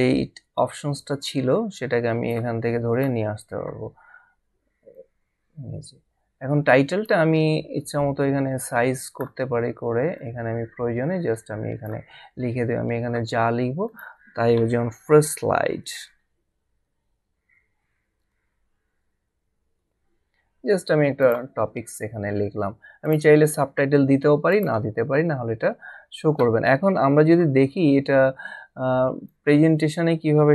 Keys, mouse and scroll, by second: 0.0 click, 4.9 click, 13.9 click, 20.5 typing, 23.0 click, 24.5 click, 29.3 click.